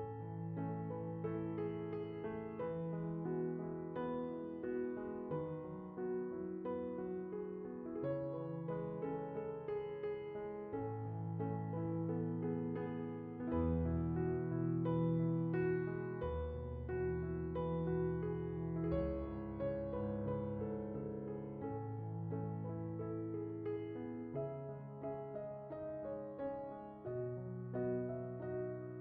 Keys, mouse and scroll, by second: 3.0 click, 21.8-22.2 drag, 22.9 shift+click, 23.6 shift+click, 24.7 shift+click, 25.4 shift+click, 26.2 shift+click, 26.7 shift+click, 28.3 x, 28.8 x.